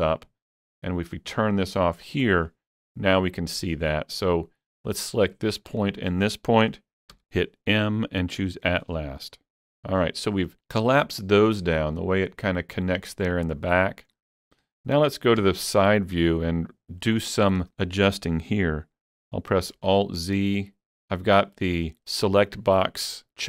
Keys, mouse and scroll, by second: 2.2 click, 4.8 click, 7.2 m, 9.6 click, 9.6-10.5 scroll down 6, 9.6 m, 10.8 middle click, 13.3 middle click, 13.3 scroll down 1, 13.6-17.6 shift+middle drag, 15.4 KP_3, 16.3-16.6 scroll up 1, 19.8 alt+z.